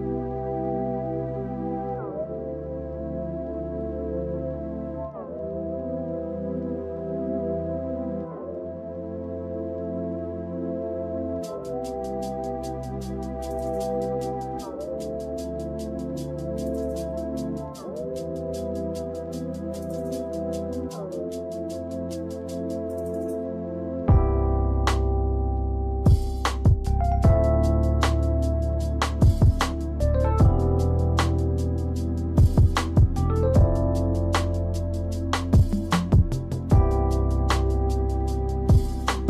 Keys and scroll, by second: 2.3 space, 3.9 space, 16.0 ctrl+z, 19.0 space, 19.7 space, 21.0 space, 25.3 space, 26.8 space, 29.2 space, 30.9 space, 32.8 ctrl+z, 35.3 space, 36.5 space.